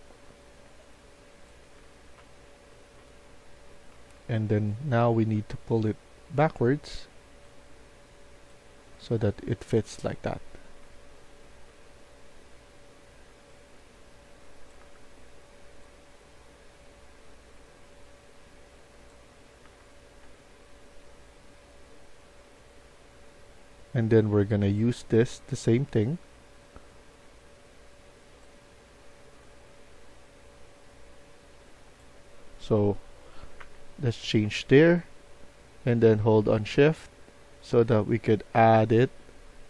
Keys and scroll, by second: 1.4-2.7 typing, 3.9 a, 5.1 Tab, 6.3 Tab, 8.9 d, 9.4 d, 10.7-11.5 typing, 14.7 Tab, 19.5 Tab, 20.1 Tab, 33.5 Tab, 34.3 Tab.